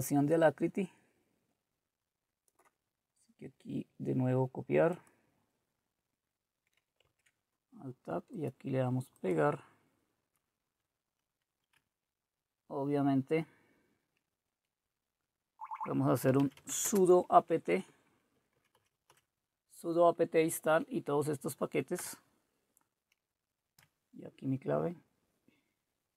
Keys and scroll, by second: 7.1 alt+Tab, 10.6 Left, 11.7 Left, 12.2-15.7 Left, 16.1-19.2 typing, 18.3 Right, 22.0 Return, 23.7 Return.